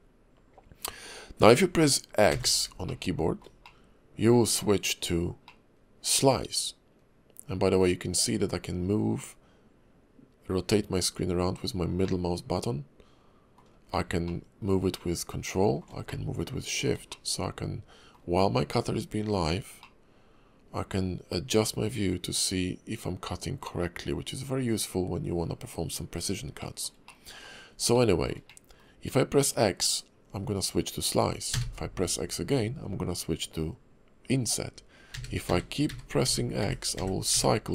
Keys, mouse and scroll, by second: 2.8 shift+middle click, 5.4 middle click, 12.0 middle click, 14.3 ctrl+middle click, 16.1 shift+middle click, 17.1 middle click, 19.8 middle click, 26.6 shift+middle click, 27.1 middle click, 27.9 shift+middle click, 28.5 middle click.